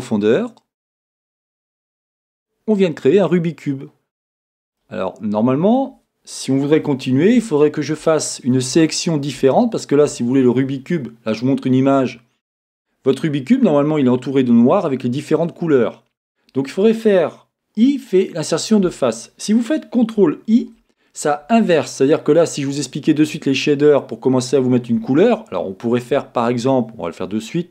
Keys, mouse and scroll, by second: 4.8-7.0 middle drag, 7.2-23.0 middle drag, 23.1 ctrl+i, 23.3 middle click.